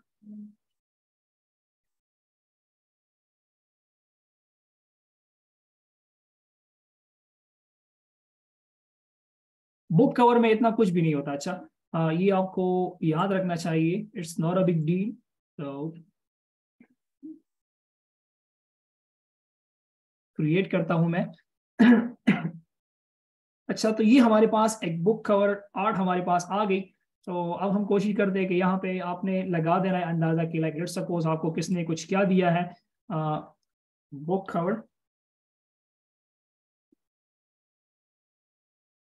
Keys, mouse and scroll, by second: 7.1 typing, 8.6 typing, 25.8-26.6 alt+shift+scroll down 1, 26.6-27.0 scroll down 1, 35.0-37.8 typing.